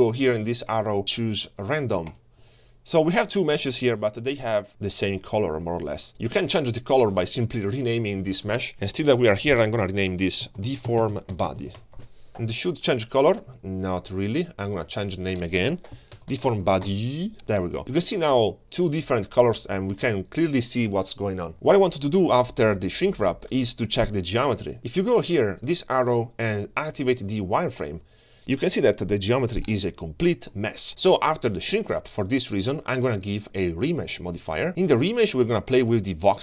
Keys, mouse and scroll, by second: 0.7-2.5 drag, 3.0-4.2 scroll up 1, 4.2-5.2 middle drag, 5.4 middle click, 7.8 click, 7.9-12.0 drag, 14.6 click, 14.8-16.9 drag, 16.3 y, 16.5 y, 17.8-18.3 middle drag, 18.4-18.9 scroll down 2, 18.9-19.6 scroll up 3, 20.6-21.5 shift+scroll down 1, 21.5 shift+middle click, 21.5 scroll down 2, 25.7-28.3 drag, 28.4-30.5 middle drag, 33.4-34.8 drag.